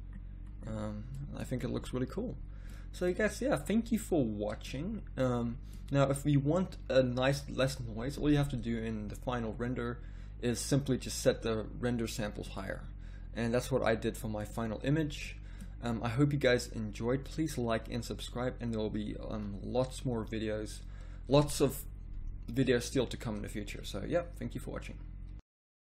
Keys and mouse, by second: 19.2 z, 19.3 z.